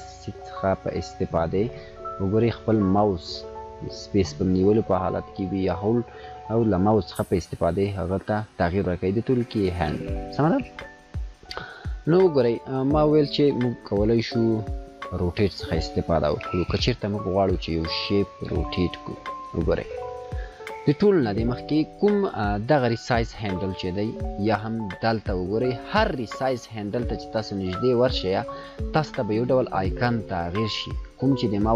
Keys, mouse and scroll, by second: 0.3 click, 0.3-9.3 typing, 6.8 click, 17.7 click, 19.0 space, 19.1 click, 19.4-19.8 space.